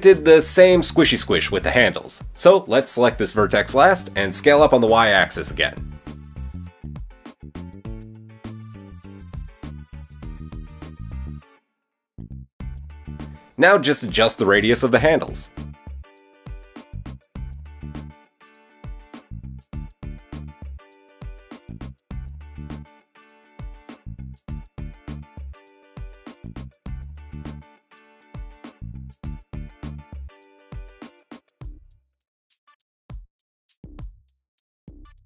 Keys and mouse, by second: 0.4 shift+click, 0.6 shift+middle click, 0.9 KP_3, 3.4 s, 6.4-8.1 middle drag, 8.1 click, 8.2-9.5 middle drag, 9.5 click, 9.6-11.1 middle drag, 11.1-16.0 drag, 11.3 KP_1, 11.3 KP_3, 13.8 alt+s, 16.0-17.2 middle drag, 17.2 click, 18.1-21.0 alt+drag, 18.5 alt+s, 21.2-22.5 drag, 22.3 alt+s, 22.5-24.8 middle drag, 24.8 click, 25.0-26.7 shift+middle drag, 26.7 click, 26.9-32.2 shift+middle drag, 28.7 alt+s, 32.2 click, 32.3-34.8 middle drag, 33.9 Tab, 34.7 KP_7, 34.8 click, 34.8-35.2 middle drag.